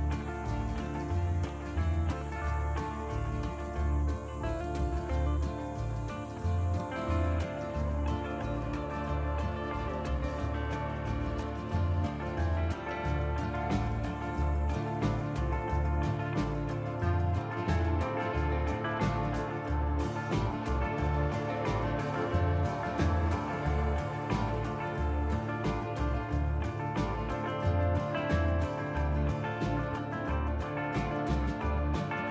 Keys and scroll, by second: 8.9 ctrl+r, 16.5 KP_Divide, 20.6 ctrl+r, 26.7 ctrl+r.